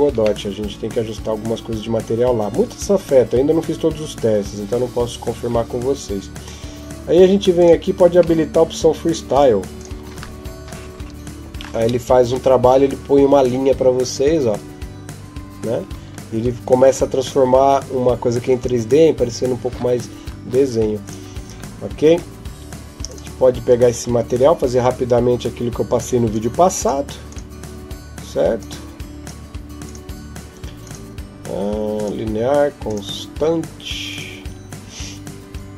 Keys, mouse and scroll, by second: 0.2 middle click, 7.4 click, 7.8-9.2 scroll down 11, 9.2 click, 9.2-9.6 scroll down 1, 9.6 click, 19.9 Escape, 20.8 right click, 22.9 click, 23.8-25.9 scroll up 11, 26.2 click, 27.1-35.7 click.